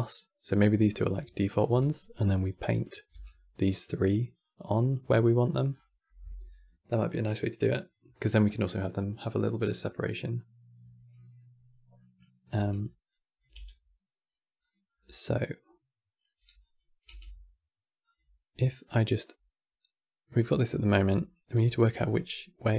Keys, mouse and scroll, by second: 0.5 middle click, 0.9 click, 1.4 g, 1.9 middle click, 2.3 click, 2.8 g, 4.6 middle click, 5.4 scroll down 4, 5.7-8.7 middle drag, 11.7-12.8 middle drag, 12.8 click, 13.2 g, 14.6-16.3 middle drag, 16.3 click, 16.7 g, 18.3 middle click, 18.7 scroll up 2, 20.4 middle click, 20.8-21.1 scroll up 5, 21.5-22.4 middle drag, 22.4-22.7 drag.